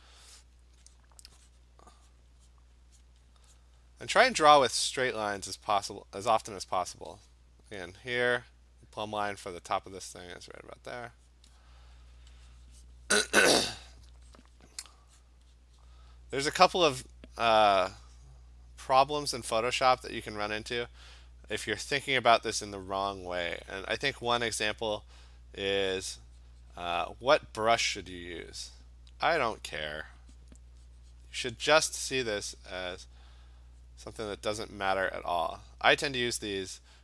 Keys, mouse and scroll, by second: 1.0 click, 1.6 click, 2.1 click, 2.5 click, 3.0 click, 3.3 click, 3.6 click, 3.8 click, 5.9 click, 6.1 click, 6.5 click, 8.0 click, 8.2 click, 8.3 click, 8.9 click, 9.5 click, 10.0 click, 10.3 click, 10.7 click, 11.0 click, 11.3 click, 12.0 click, 12.4 click, 12.7 click, 12.9 click, 13.7 click, 13.9 click, 14.4 click, 14.5 click, 15.2 click, 16.7 click, 16.8 click, 18.0 click, 18.3 click, 18.9 click, 19.4 click, 19.6 click, 20.4 click, 20.8 click, 21.2 click, 21.6 click, 24.1 click, 24.3 click, 24.9 click, 25.4 click, 25.6 click, 25.9 click, 26.4 click, 27.2 click, 28.3-34.2 drag, 35.3 click, 35.8 click.